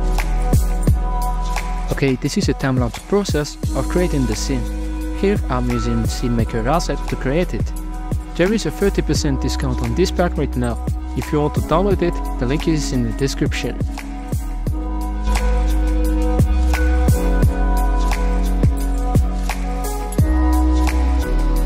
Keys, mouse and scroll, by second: 0.0 shift+click, 0.4 shift+click, 0.9 middle click, 1.1 g, 1.7 middle drag, 2.0 right click, 2.2 click, 3.5 middle click, 5.4 scroll up 3, 5.6 right click, 5.7 g, 7.2 click, 7.4 g, 7.7 middle click, 7.7 scroll down 2, 7.9 r, 9.1-9.5 middle drag, 9.5 g, 9.7-10.2 right drag, 10.2 g, 10.6 g, 11.0 right click, 11.3 click, 11.7-12.8 drag, 12.8 right click, 13.0 scroll up 4, 13.2 shift+middle click, 13.4 KP_Decimal, 13.7 scroll up 3, 13.7 click, 14.4 click, 15.1 shift+middle drag, 15.3 right click, 15.6 middle click, 15.8 right click, 16.0 g, 16.4 s, 16.9 g, 18.9 click, 19.5-21.4 typing, 20.3 scroll up 1.